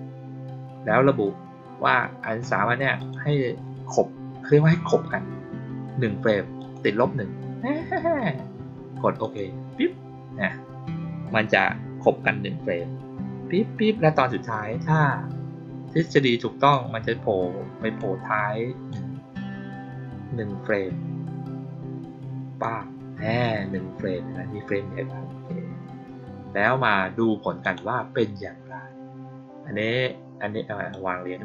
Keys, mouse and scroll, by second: 2.9 click, 6.5 click, 9.1 click, 16.6-17.9 drag, 18.8-22.5 drag, 27.5 click, 30.8-31.4 drag.